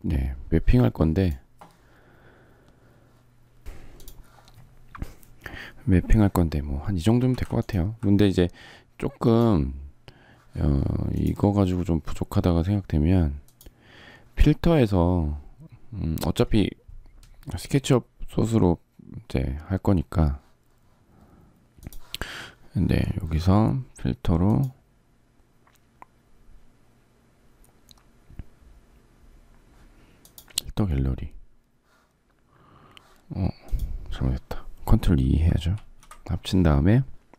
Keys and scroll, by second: 35.6 ctrl+e.